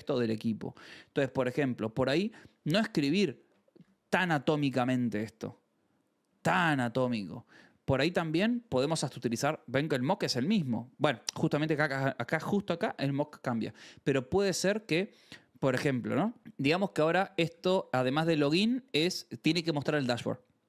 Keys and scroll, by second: 5.5 k, 6.3 j, 7.7 k, 8.9 shift+v, 10.5 Escape, 11.0-13.4 typing, 13.0 Escape, 16.1-18.0 typing.